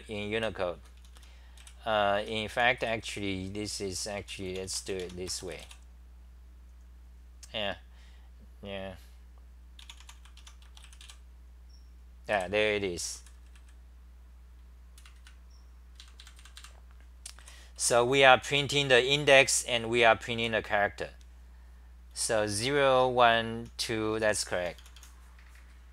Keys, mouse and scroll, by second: 0.0-5.1 typing, 9.6-10.5 typing, 12.3 w, 13.1 d, 15.0 Left, 15.1 Left, 16.0 super+=, 17.1-20.3 typing, 21.9-24.9 typing.